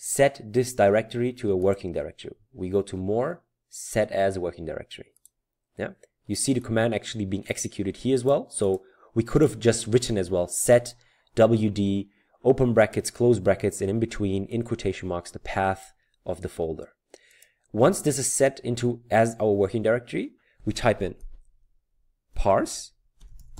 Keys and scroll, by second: 23.0-23.5 typing.